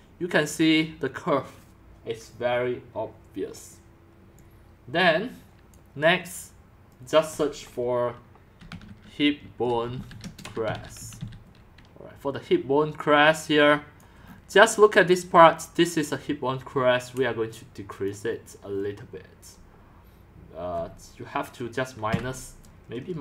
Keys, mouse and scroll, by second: 4.3-5.9 drag, 6.9 click, 7.4 click, 8.3-11.7 typing, 14.1-14.4 click, 14.3 click, 18.5-23.2 drag, 22.1-23.2 typing.